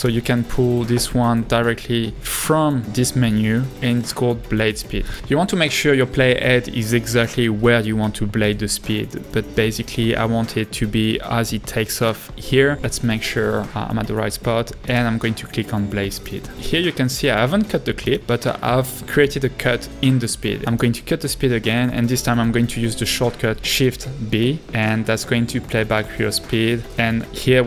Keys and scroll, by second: 12.8 Right, 22.0 Right, 24.0 b.